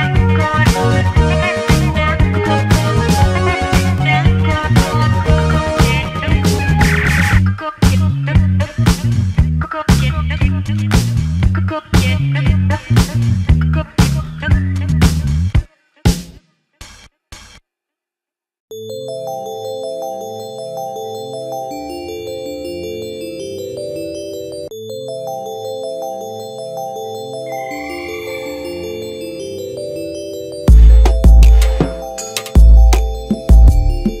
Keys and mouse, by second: 0.0 Tab, 0.9 Tab, 0.9-5.7 typing, 1.3 ctrl+m, 2.4 Tab, 3.0 ctrl+m, 3.8 Tab, 3.8 click, 4.5 Tab, 5.2 ctrl+m, 6.2 shift+click, 8.8 shift+l, 9.0 click, 9.8 shift+d, 9.9 ctrl+m, 10.1 g, 10.6 a, 11.5 click, 11.6 shift+Tab, 11.6-12.3 shift+middle drag, 12.3 Tab, 12.3 /, 12.3 shift+click, 12.7 ctrl+h, 13.5 Tab, 13.5-14.5 typing, 14.2 ctrl+m, 15.3 shift+click, 15.5 Tab, 15.6-16.9 typing, 16.5 ctrl+m, 17.4 Tab, 18.1 click, 18.1-21.8 typing, 18.3 Tab, 18.8 ctrl+m, 19.4 Tab, 20.2 Tab, 21.2 ctrl+m, 23.4 /, 23.5 Tab, 24.8 shift+Tab, 25.8 alt+z, 25.8 KP_3, 26.4 shift+d, 26.7 ctrl+m, 26.9 g, 27.1 a, 27.9 shift+Tab, 28.1 click, 29.1 right click, 30.6-31.6 drag, 31.6 ctrl+z, 32.0 KP_3, 32.2 ctrl+s, 32.2-34.2 shift+drag.